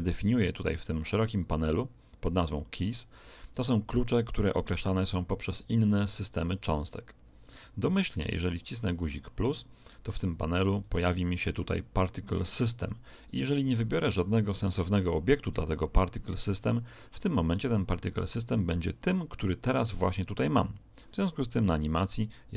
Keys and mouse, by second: 7.4-9.4 middle drag, 10.8 click, 21.4 alt+a.